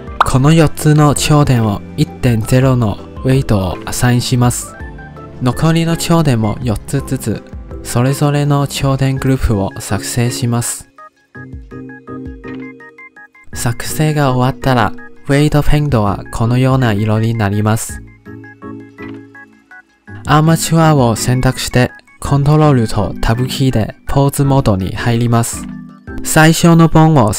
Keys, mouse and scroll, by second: 0.9 click, 2.9-5.2 drag, 5.4 click, 6.0 0, 6.3 click, 6.5 click, 7.3 0, 7.8-8.5 drag, 8.5 0, 8.9-9.6 drag, 9.6 0, 10.2 click, 10.9 0, 11.4 click, 12.3 0, 12.8 click, 15.8 ctrl+Tab, 16.7-17.3 scroll up 2, 17.3 click, 17.6 click, 17.9 click, 18.1 click, 18.3-18.7 scroll down 3, 18.7 click, 18.9 click, 19.2 click, 19.6 ctrl+Tab, 21.3 click, 23.7 ctrl+Tab, 24.4 ctrl+Tab, 24.5 ctrl+Tab.